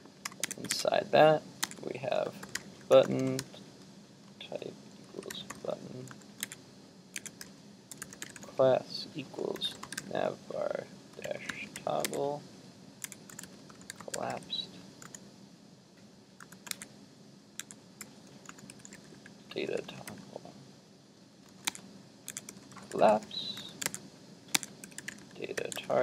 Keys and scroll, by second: 0.8 super+Tab, 6.5 super+Tab, 12.1 super+Tab, 16.8 super+Tab, 21.7 super+Tab.